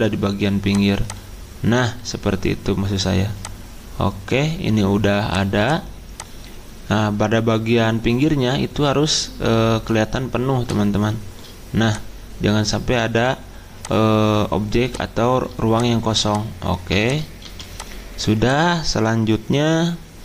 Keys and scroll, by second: 17.4 c.